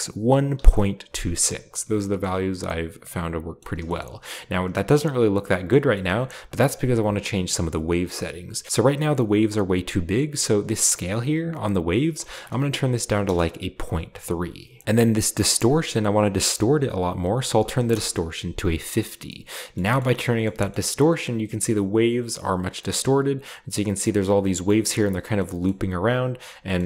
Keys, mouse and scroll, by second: 0.6 Return, 1.5-2.3 scroll down 1, 2.2-4.7 middle drag, 5.7 middle click, 6.2-6.6 middle drag, 6.6 click, 7.8 middle click, 8.1-8.7 scroll up 1, 12.2-12.8 typing, 13.4 Return, 14.6-15.0 scroll down 1, 15.5 click, 17.2 typing, 17.9 Return, 19.2-20.4 middle drag, 20.4 shift+scroll down 1, 20.7-21.2 shift+scroll up 1, 22.8-25.3 middle drag, 26.4-26.8 scroll down 2.